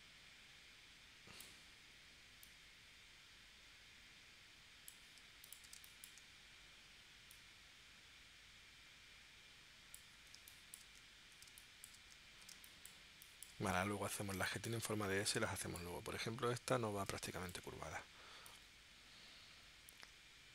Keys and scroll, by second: 5.7 super+space, 10.4 space, 11.5 space, 12.5 space, 14.4 space, 17.1 space.